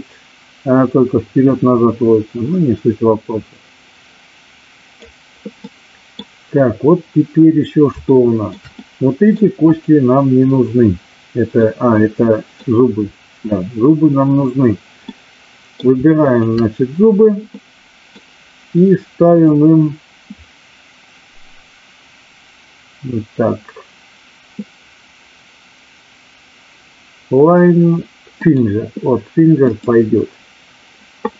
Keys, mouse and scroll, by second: 5.7-6.3 middle drag, 8.1 shift+middle drag, 8.8 middle click, 9.7 click, 11.4-12.6 middle drag, 15.1-15.7 middle drag, 16.2 shift+click, 17.6 middle click, 19.2-28.6 drag.